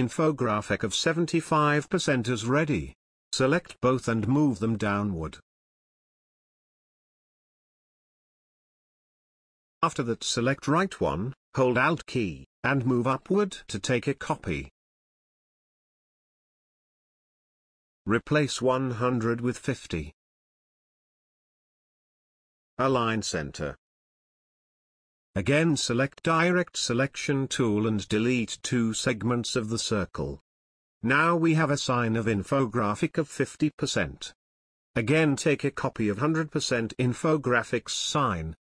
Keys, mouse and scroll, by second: 9.3 space, 9.5-12.1 drag, 12.1-15.3 alt+drag, 17.0 t, 17.4-21.4 drag, 21.6-25.1 drag, 25.1 shift+click, 26.0 click, 28.5 Delete, 29.5 click, 31.1 Delete, 33.3-37.1 drag, 37.1-38.7 alt+drag.